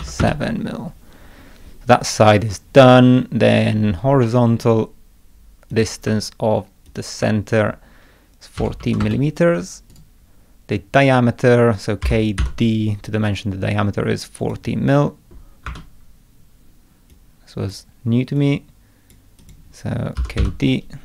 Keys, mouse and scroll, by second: 4.2 middle click, 5.7 click, 6.9 ctrl+click, 9.9 right click, 12.0 k, 12.4 d, 14.4 click, 15.7 Escape, 17.1-17.7 drag, 18.4 click, 19.4 click, 19.9-20.9 typing.